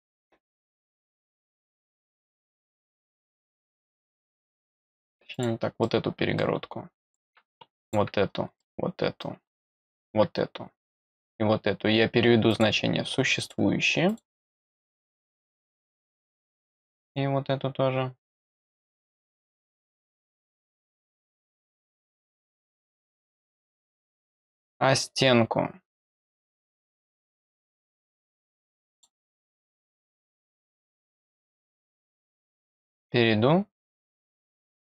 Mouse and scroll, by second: 0.7 click, 2.0 click, 3.9 click, 4.5 click, 5.3 click, 5.8 middle click, 7.0 click, 7.8 click, 8.5-9.8 middle drag, 9.8 click, 11.1 click, 12.4 click, 13.4 click, 14.0 click, 15.4 middle click, 16.9 click, 18.4 click, 18.9 click, 20.4 click, 21.2 click, 23.9 click, 26.3 click, 28.9 click, 30.3-31.2 scroll down 2, 31.2 click, 32.1 click, 32.9 click, 34.2 click.